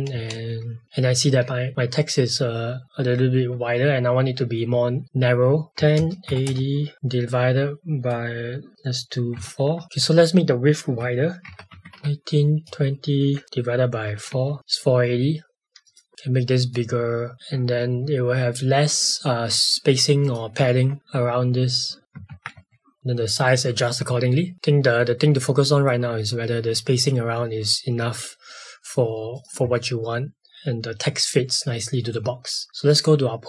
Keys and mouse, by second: 0.1 space, 0.8 v, 16.1 click, 17.3 click, 20.2 click, 22.1 Tab, 22.5 space, 24.5 click, 28.5 middle click, 29.3 click, 32.8 click.